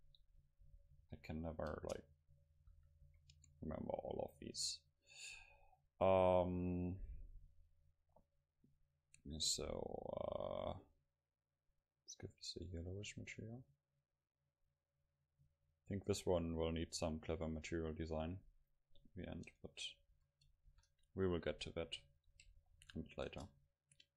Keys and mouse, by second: 1.0 KP_7, 1.8 Tab, 2.9 a, 3.1 a, 4.4-7.1 drag, 8.8-11.0 drag, 19.4-20.6 middle drag, 19.5 Tab, 20.1 a, 20.7 ctrl+s, 21.9 KP_7, 23.3 Tab.